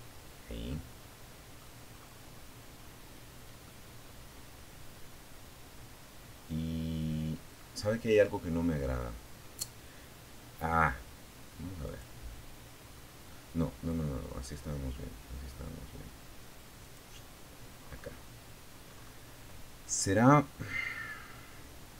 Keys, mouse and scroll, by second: 0.1-0.7 scroll up 1, 1.0 scroll up 1, 1.8-6.6 middle drag, 6.7 scroll down 1, 10.0 click, 11.0 scroll down 2, 15.0 click, 16.0-16.6 scroll up 1, 17.0-18.2 scroll up 1, 18.2 scroll up 1.